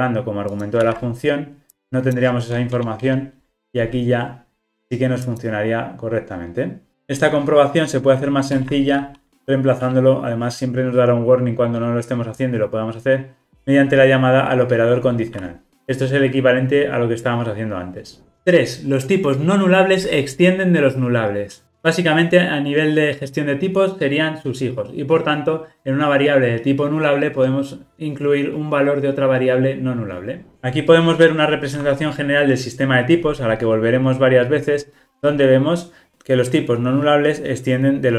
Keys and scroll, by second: 0.8 super+v, 8.6 alt+Return.